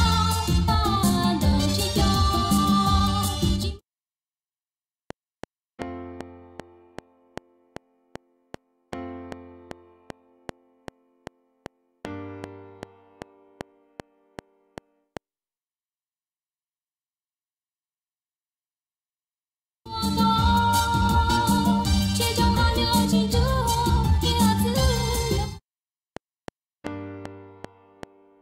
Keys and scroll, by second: 3.5 space, 4.9 F7, 15.3 space, 16.0 Right, 18.2 ctrl+Left, 19.8 space, 25.3 space, 26.0 F7.